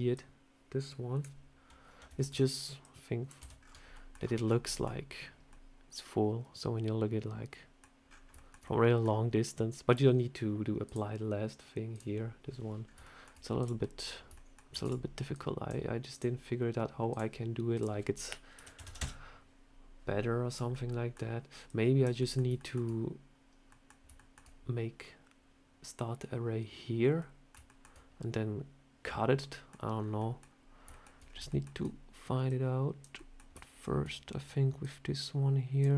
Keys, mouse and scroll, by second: 0.0 click, 2.1 ctrl+z, 2.7 click, 3.3 Tab, 3.4-4.4 scroll down 13, 3.8 middle click, 4.5 middle click, 5.4 middle click, 7.9 scroll up 5, 8.2 shift+middle click, 8.2 shift+middle click, 8.5 middle click, 10.7 click, 12.7 scroll up 2, 12.9 shift+middle click, 13.5 click, 13.7 middle click, 14.2 shift+middle click, 14.6 shift+d, 15.2 click, 16.0 click, 17.0 click, 17.6 click, 20.4 click, 20.6 middle click, 21.5 click, 22.1 middle click, 22.4 shift+middle click, 23.6 middle click, 24.0 shift+middle click, 27.1 middle click, 27.5 shift+middle click, 29.3 middle click, 29.8 scroll down 2, 30.0 middle click, 30.8 middle click, 31.1 scroll up 3, 31.4 shift+middle click, 31.6 shift+scroll down 1, 32.3 click, 33.0 middle click, 33.5 shift+middle click, 34.7 click, 35.8 middle click.